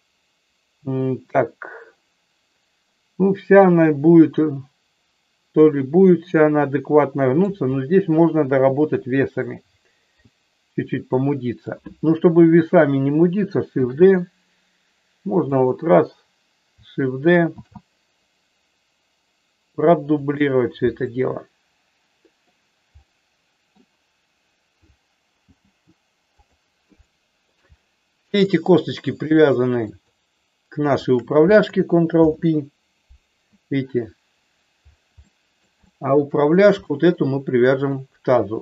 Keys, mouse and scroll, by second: 5.5-7.4 middle drag, 11.1 middle click, 13.8 shift+d, 15.5 click, 17.6 shift+d, 20.3 click, 21.0-22.4 middle drag, 22.9 middle click, 25.4 g, 26.3 click, 26.9 middle click, 28.4 click, 29.2 shift+click, 29.8 shift+click, 32.2 ctrl+p, 35.2 middle click, 35.8 shift+middle click, 36.8 middle click.